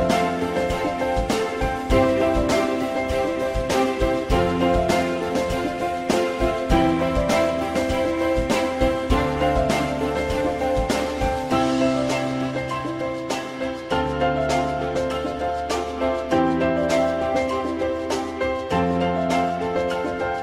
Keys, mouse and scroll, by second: 1.8 click, 3.4 right click, 3.5 click, 5.5 click, 6.1 alt+middle click, 9.2 ctrl+z, 9.8 ctrl+z, 10.4 ctrl+z.